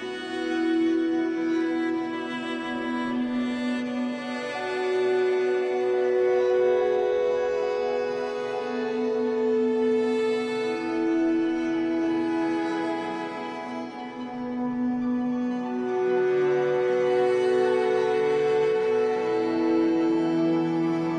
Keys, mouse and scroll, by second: 5.9-7.1 middle drag, 7.1-14.3 drag, 14.2 scroll down 1, 14.3-18.3 middle drag, 14.7 scroll down 1, 16.4 scroll up 1, 17.5-18.3 scroll up 2, 18.3-21.0 drag, 21.0-21.1 middle drag.